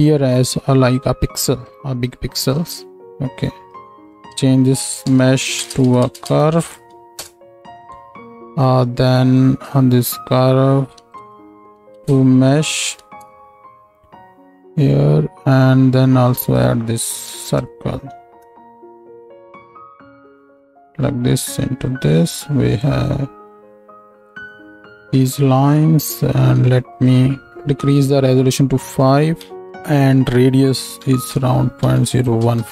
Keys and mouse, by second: 8.3 click, 14.8-16.4 drag, 19.6 click.